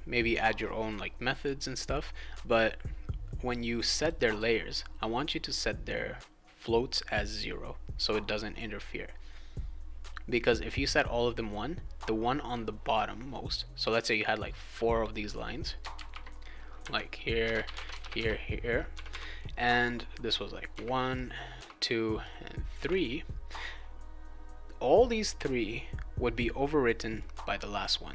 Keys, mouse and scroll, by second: 4.0 click, 4.1 click, 4.3 click, 5.5 click, 14.0 click, 14.3-15.8 drag, 15.9 ctrl+c, 17.4 Return, 17.6 ctrl+v, 17.7 Return, 17.9 ctrl+v, 18.0 Return, 18.1 ctrl+v, 20.3 click, 20.7 1, 21.1 click, 21.5 2, 22.2 click, 22.8 3, 27.2-28.1 drag.